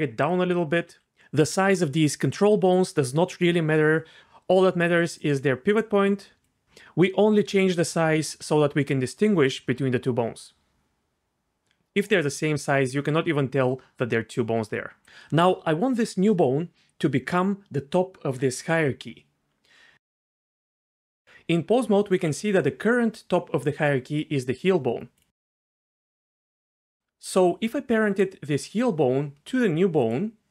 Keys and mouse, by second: 0.2 click, 0.5 click, 0.9 s, 4.2 d, 4.7-6.6 d, 6.4 right click, 10.7 s, 19.7 Tab, 22.1 g, 25.6 Tab, 30.1 shift+click.